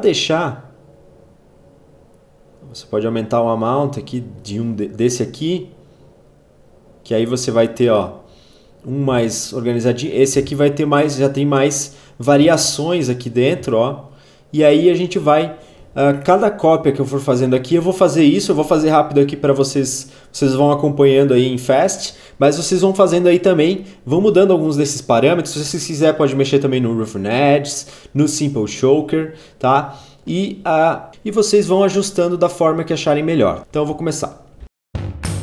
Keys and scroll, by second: 33.6 ctrl+z, 34.6 alt+Page_Up.